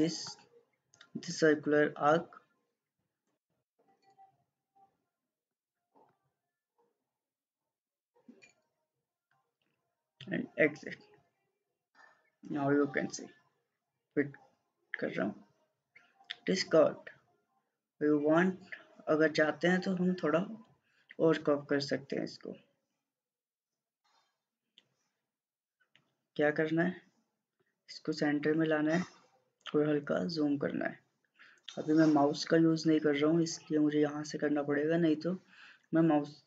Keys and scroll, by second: 3.5 1, 3.7 Return, 7.9 1, 8.1 Return.